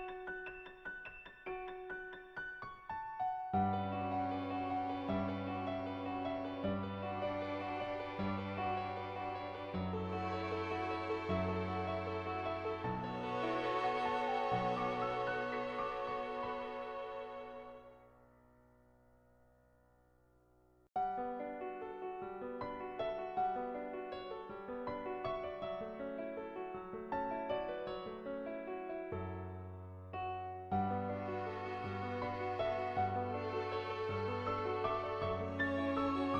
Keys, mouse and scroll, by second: 0.9-2.3 drag, 3.0 ctrl+z, 3.4 shift+click, 4.1 click, 5.0 shift+click, 5.6 shift+click, 7.3 shift+click, 8.1 click, 9.1 click, 10.1 click, 10.6 shift+click, 11.0-12.1 middle drag, 14.0 click, 19.1 click, 20.0 middle click, 21.4 ], 21.4 ], 21.6 click, 21.6 ], 28.6-30.2 typing, 29.2 click, 30.7 click, 31.9 ctrl+z, 32.1-34.4 typing, 32.9 click, 33.4 ctrl+z, 33.8 click, 34.6-36.3 drag.